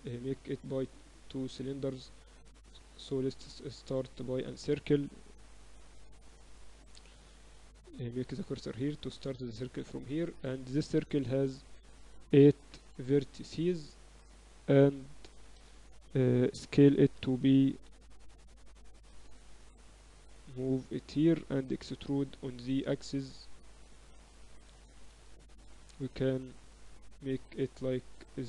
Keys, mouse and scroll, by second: 1.1-4.3 middle drag, 1.8 shift+a, 2.6 shift+a, 5.8 middle click, 6.7 x, 8.1-10.1 drag, 8.3 shift+a, 11.2 F6, 14.7 r, 16.5 s, 19.3 Tab, 19.5 a, 19.7 a, 20.4 click, 21.8 e, 24.3 a, 24.5 a, 24.9 s, 27.5 middle click.